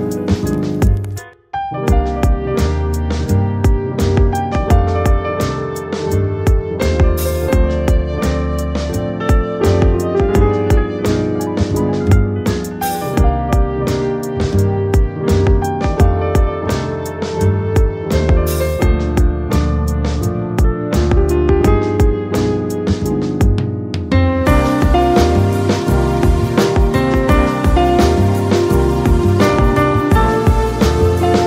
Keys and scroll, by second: 8.4 Left, 30.6 space.